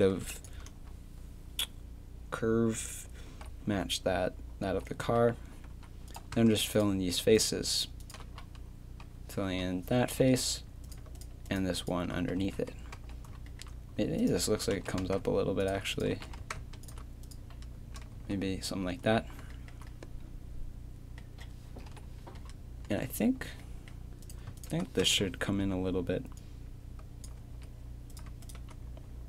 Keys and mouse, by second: 3.3 z, 4.1 z, 4.6 z, 5.7 a, 8.2 right click, 9.2 right click, 9.5 KP_3, 10.2 f, 12.4 f, 12.9 z, 14.0 click, 14.8 g, 16.1 g, 17.8 Tab, 18.1 z, 18.9 a, 21.9 KP_1, 22.8 Tab, 25.0 KP_1, 25.5 z, 27.4 z.